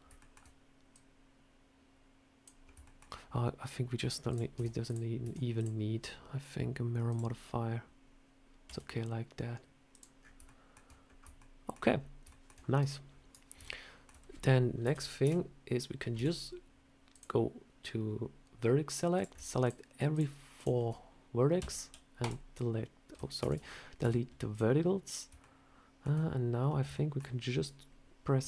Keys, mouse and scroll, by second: 0.0 shift+middle click, 0.8 click, 2.5 scroll up 2, 2.7 shift+middle click, 4.1 click, 4.4 Tab, 4.7 click, 5.1 Tab, 5.4 click, 6.9 click, 8.5 s, 10.0 scroll up 4, 10.3 shift+middle click, 10.9 scroll up 2, 11.2 shift+middle click, 11.8 scroll up 1, 12.1 shift+middle click, 12.4 scroll down 1, 13.5 middle click, 14.7 KP_7, 15.1 KP_1, 16.0 Tab, 17.0 click, 19.0 click, 19.5 shift+click, 19.5 shift+click, 21.4 shift+click, 21.4 x, 23.3 ctrl+z, 23.9 x, 24.9 scroll up 1, 25.3 shift+middle click, 27.9 shift+middle click, 27.9-28.3 scroll up 1.